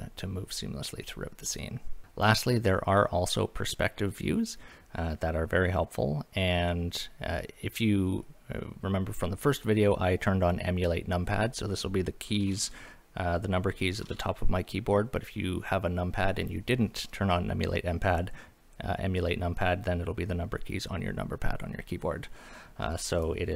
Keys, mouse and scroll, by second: 0.2-0.8 middle drag, 23.2 click.